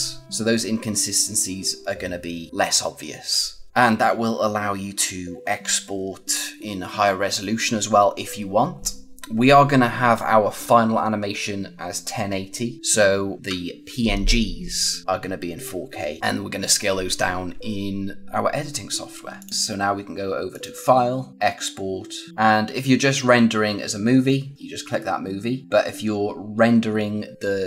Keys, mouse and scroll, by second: 3.7 click, 19.5 click, 20.4 click.